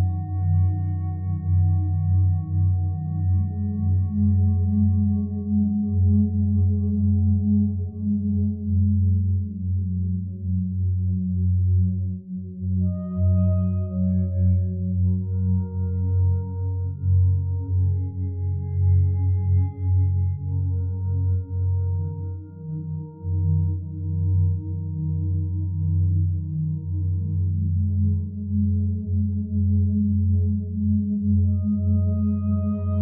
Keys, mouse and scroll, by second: 15.6 F9.